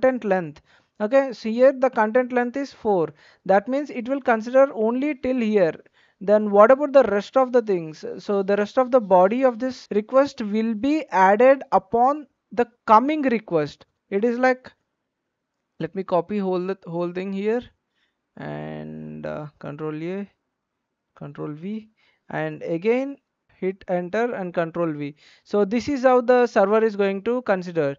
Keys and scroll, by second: 15.0 ctrl+a, 15.7 ctrl+c, 19.3 ctrl+a, 20.5 ctrl+v, 23.4 Return, 24.0 ctrl+v.